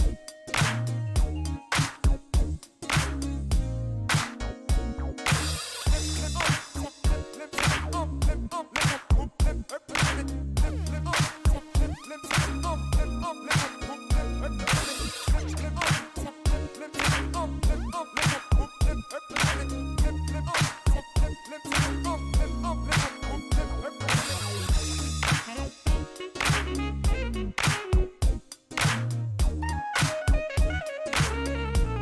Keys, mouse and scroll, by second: 0.2 shift+right click, 5.5 click, 6.6 click, 7.5 click, 9.1 click, 10.6 click, 11.2 scroll down 1, 11.5 shift+middle click, 11.9 shift+right click, 12.5 shift+scroll down 1, 12.7 shift+middle click, 13.1 shift+right click, 14.9 shift+scroll up 1, 15.3-16.8 middle drag, 20.3 click, 22.9 click, 23.7 click, 27.7 click, 28.4 click, 29.1 click, 29.9 click.